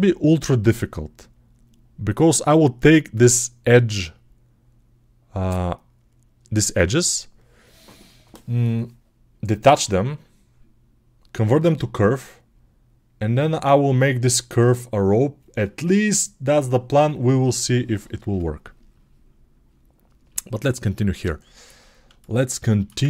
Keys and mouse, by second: 19.2 click, 19.7 middle click, 20.5-22.5 drag, 22.6 ctrl+alt+shift+click.